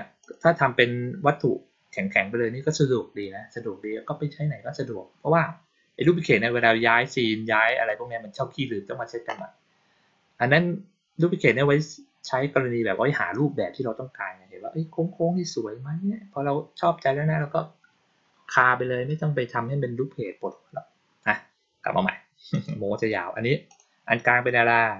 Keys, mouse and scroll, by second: 0.1 click, 22.4 click, 23.6 click.